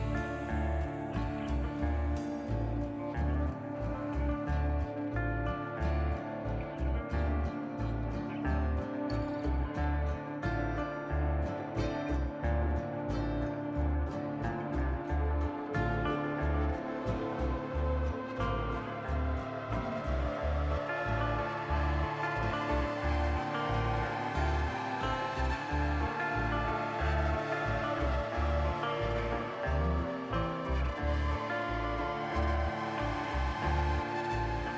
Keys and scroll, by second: 3.4 `, 33.8 a, 34.1 u.